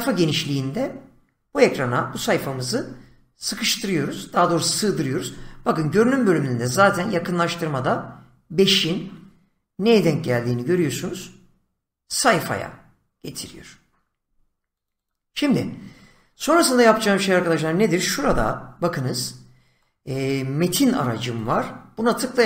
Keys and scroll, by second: 9.9 <, 18.3 <.